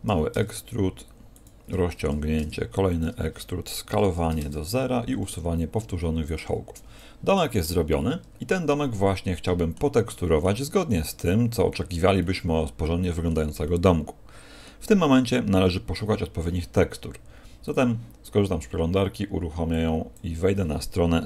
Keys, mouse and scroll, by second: 0.0 s, 1.4 ctrl+click, 2.2 e, 2.9 ctrl+click, 3.8 s, 4.7 w, 6.9 a, 7.3 middle click, 7.7 z, 7.9 middle click, 10.1 middle click, 10.9 middle click, 12.1 middle click, 13.6 middle click.